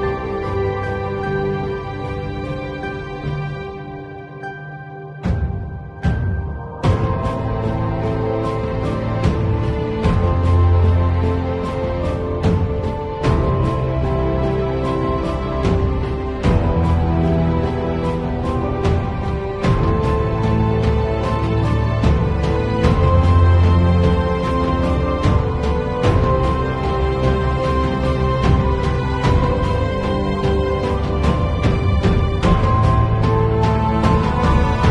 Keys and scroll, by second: 2.8 space, 5.7 space, 6.0 x, 8.0 space, 8.4 x, 9.2 super+z, 9.7-11.1 typing, 13.4-15.6 typing, 16.7 ], 17.5 [, 19.7 space, 20.1 x, 20.8 x, 22.7 space, 23.7 space, 24.6 space, 30.3 ], 31.8 space, 32.5 space, 34.5 v.